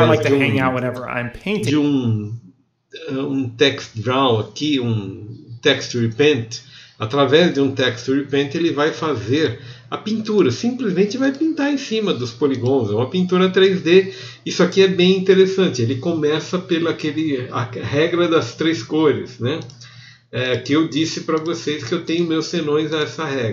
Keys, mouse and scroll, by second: 0.5 middle click, 20.5-21.5 ctrl+drag, 21.5 f, 22.3 click, 22.3 f.